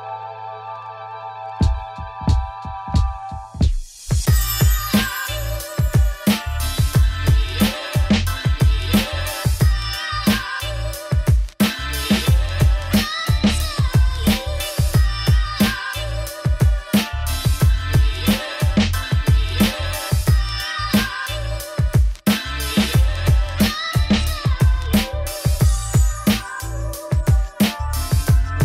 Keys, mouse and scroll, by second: 0.0 click, 1.2 Tab, 4.4 click, 5.4 click, 5.8 a, 6.8 scroll down 1, 6.9-8.2 shift+middle drag, 8.2 Tab, 8.9-11.9 middle drag, 11.9 click, 12.1 click, 12.5 click, 15.0 click, 15.4 s, 23.6-25.0 drag, 25.0-25.4 scroll down 1, 25.4 click, 26.7 click.